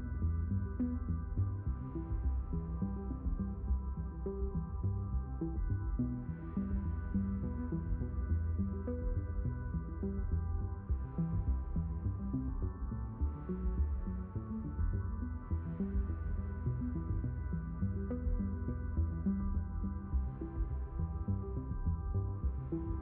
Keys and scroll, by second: 20.4 b, 21.6 m, 21.9 r.